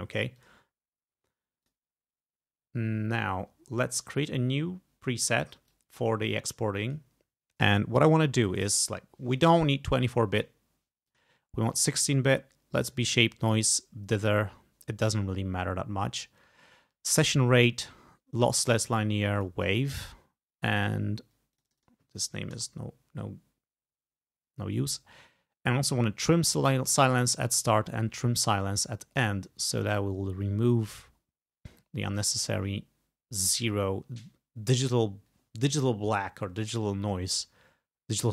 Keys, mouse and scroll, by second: 0.4 click, 1.7 click, 4.2 click, 5.7-7.1 drag, 11.1 click, 12.9 click, 19.4 click, 21.6 click, 22.6 BackSpace, 26.3 click, 28.2 click.